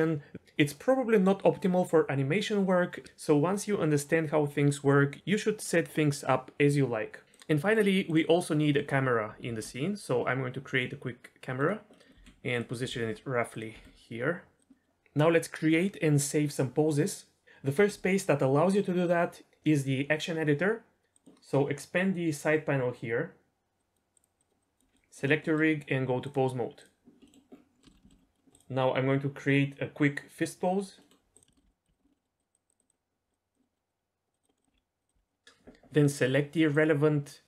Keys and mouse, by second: 7.4-8.1 drag, 8.6 middle drag, 9.4 shift+a, 11.9 click, 12.2 g, 12.8 r, 12.9 r, 13.5 click, 13.7 r, 14.7 middle click, 23.8 click, 24.4 click, 25.4 middle click, 26.2-26.8 drag, 27.2 middle drag, 27.8 shift+middle click, 28.0 shift+middle drag, 31.0 middle click, 31.6 middle click, 32.0 middle click, 32.4 drag, 32.8 click, 33.7 middle click, 34.4 drag, 34.5 middle drag, 34.7 r, 35.2 click, 35.2 r, 35.3 middle drag, 36.9-37.4 drag.